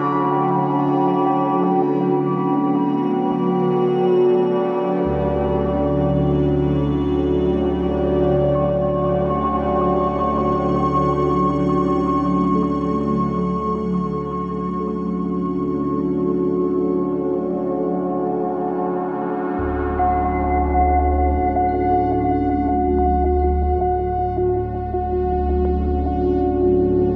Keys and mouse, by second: 6.9 s, 14.6-15.6 middle drag, 22.9-25.2 middle drag.